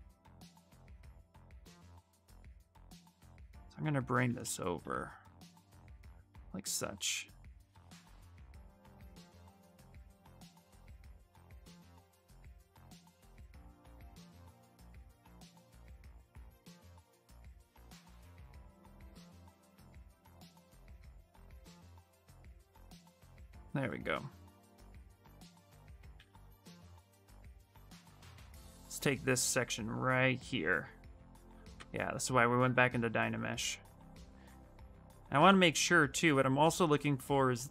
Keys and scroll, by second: 3.8 q, 4.7 s, 7.7 ctrl+z, 8.6 ctrl+shift+z, 9.7 alt+s, 16.9 ctrl+z, 23.8 s, 26.0 ctrl+z, 26.3 s, 27.2 s, 31.0 ctrl+z.